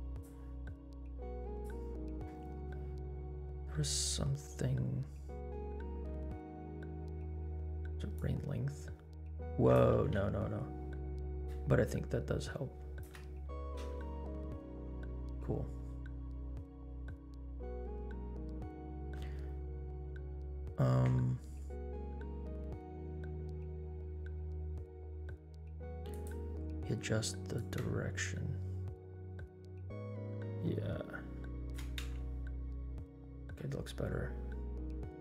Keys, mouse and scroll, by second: 1.5 click, 8.1-9.9 drag, 10.4 ctrl+z, 11.4-13.1 shift+drag, 13.4 scroll down 2, 13.9 space, 15.2 scroll down 1, 16.9 space, 19.3 space, 20.6 space, 26.1 click, 27.5-31.8 shift+drag, 32.1 space, 33.6-34.4 scroll up 3.